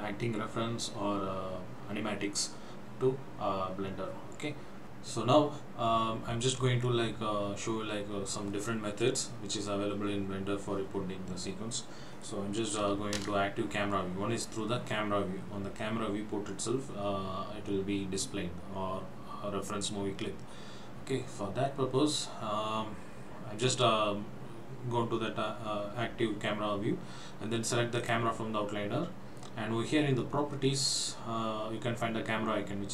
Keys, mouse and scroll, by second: 13.3 KP_0, 24.3-25.7 scroll up 2, 28.1 click.